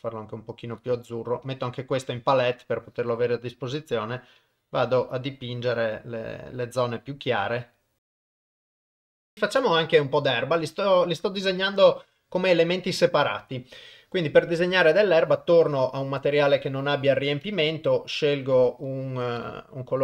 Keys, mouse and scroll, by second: 3.6-5.8 drag, 6.5-9.0 drag, 14.6 click, 17.4 click.